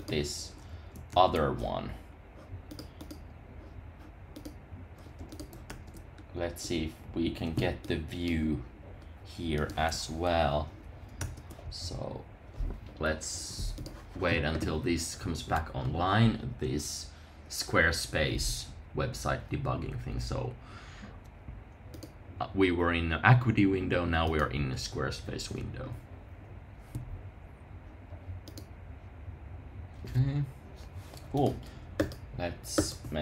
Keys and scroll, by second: 1.1 super+r, 5.6 super+r, 11.2 super+r.